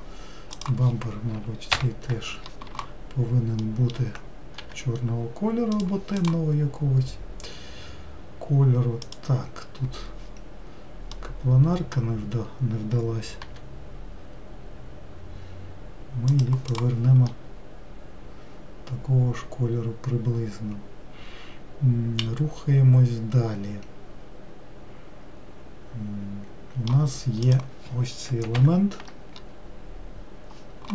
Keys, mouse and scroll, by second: 1.1 click, 2.2 ctrl+l, 5.2 g, 6.8 click, 9.7 click, 14.0 g, 17.3 click, 17.9-20.8 middle drag, 28.0 click, 29.1 ctrl+l.